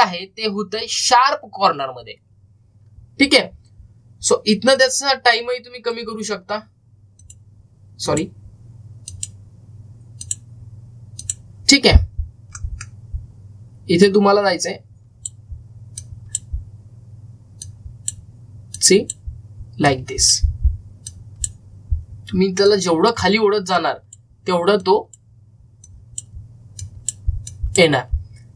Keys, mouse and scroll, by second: 1.0 scroll down 1, 3.3-3.7 scroll down 1, 5.1-7.4 typing, 5.6 click, 13.4 middle click, 14.9-27.6 drag, 14.9-15.7 typing.